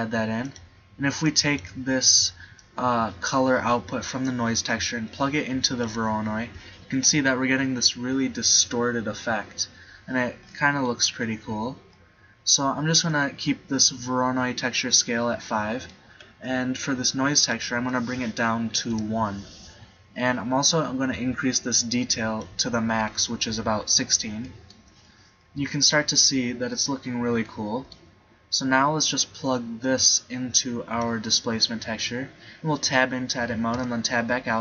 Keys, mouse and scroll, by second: 0.7-1.8 drag, 10.5 middle click, 10.9 middle click, 17.4-19.0 drag, 23.6 middle click, 24.0-26.7 middle drag, 30.1 click, 31.8 click, 32.9 Tab, 33.8 Tab.